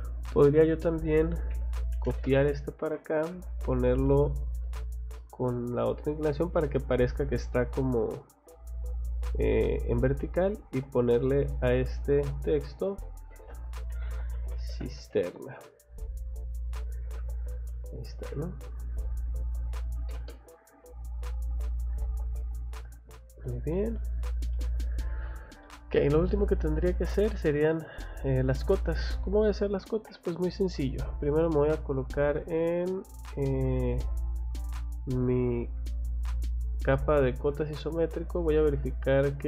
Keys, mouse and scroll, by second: 0.3 click, 1.5 c, 1.9 o, 2.1 space, 2.2 click, 3.1 click, 3.3 Escape, 3.6 click, 4.8 click, 5.7 click, 6.7 middle click, 8.3 scroll down 1, 9.8 scroll up 1, 10.3 click, 10.5 click, 10.9 click, 11.0 click, 11.6 click, 11.7 click, 12.7 click, 13.9 c, 14.6 r, 15.0 a, 16.7 click, 17.0 Escape, 17.3 scroll down 1, 18.5 middle click, 18.9 click, 19.1 click, 20.0 m, 20.2 space, 20.4 click, 21.4 click, 21.7 scroll down 2, 21.9 Escape, 22.4 middle click, 24.0 scroll down 2, 24.5 middle click, 25.3 scroll down 2, 25.6 middle click, 26.9 scroll up 2, 29.9 Escape, 31.1 click, 33.1 click, 33.8 Escape, 34.9 click, 36.4 click, 37.1 scroll down 2, 38.2 click, 38.4 click, 38.7 middle click.